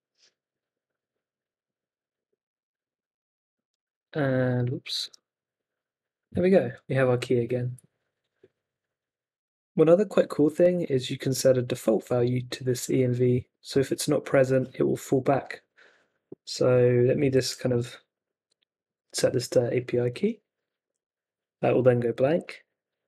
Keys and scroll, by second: 2.4 super+Tab, 3.6 super+r, 5.0 super+r, 17.2 x, 17.6 super+s, 19.3 super+Tab, 20.8 super+r, 22.3 super+Tab.